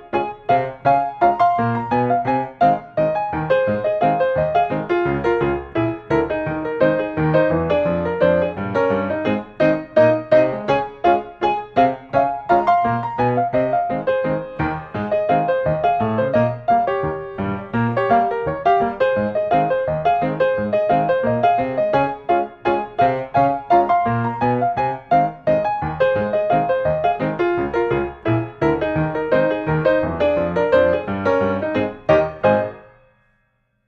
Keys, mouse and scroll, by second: 0.4 click, 2.5 click, 3.3 Escape, 3.7-4.1 scroll, 4.5 scroll, 4.6-5.6 middle drag, 5.6-6.2 scroll, 8.2 click, 9.3-10.1 scroll, 10.2-10.7 scroll, 11.1-12.1 scroll, 12.1-12.8 scroll, 13.7-14.7 scroll, 14.7-15.2 scroll, 15.2 scroll up 3, 15.2 click, 17.3 click, 18.3 n, 19.3 s, 20.2 click, 21.6 click, 21.9 scroll, 23.3 click, 23.6 Escape, 23.9 scroll, 24.7-25.1 scroll, 25.7 click, 28.3 click, 29.9-30.4 scroll, 31.0 s, 32.5-33.8 drag.